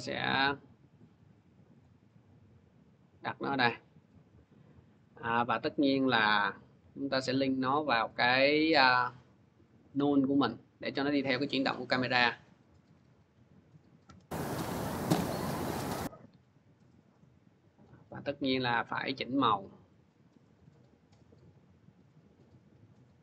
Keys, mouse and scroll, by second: 1.6-4.3 drag, 8.3 click, 9.7 click, 13.9 click, 15.3-23.2 drag.